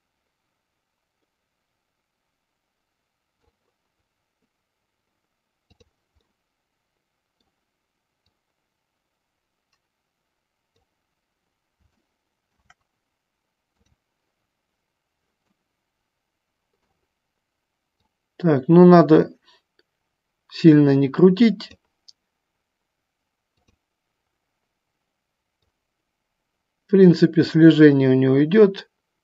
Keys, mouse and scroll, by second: 6.3-7.8 middle drag, 8.5-11.1 drag, 12.2 shift+middle click, 13.8 click, 15.7-16.9 middle drag, 18.3-21.8 drag, 25.9-29.2 drag.